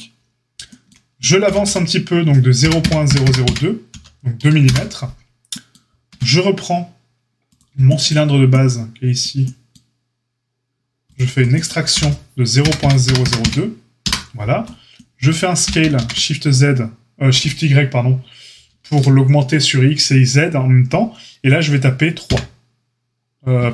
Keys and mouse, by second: 1.4 g, 6.0 Tab, 7.5-11.1 shift+drag, 11.1-23.7 middle drag, 11.9 e, 15.6 s.